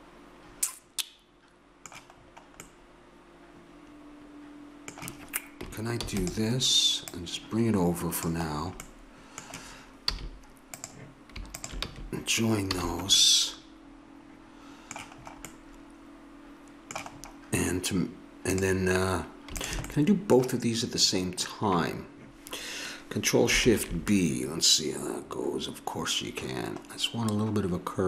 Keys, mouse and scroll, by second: 2.7-4.8 middle drag, 6.0 shift+d, 7.1-9.0 drag, 10.0 a, 10.7-11.8 drag, 11.8 f, 12.7 a, 13.2 click, 15.1 middle click, 18.5-21.6 drag.